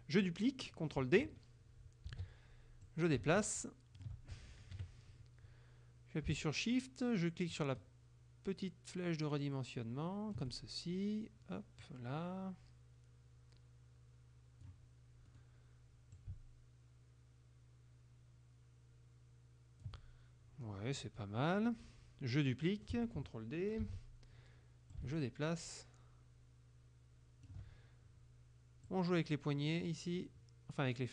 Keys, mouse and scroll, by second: 2.1 ctrl+d, 2.9-4.2 drag, 4.8 KP_Subtract, 7.6-10.6 shift+drag, 11.9-14.9 drag, 15.3 click, 16.2 shift+click, 21.1 click, 21.6 click, 23.9 ctrl+d, 25.0-27.7 ctrl+shift+drag, 28.9-31.1 drag.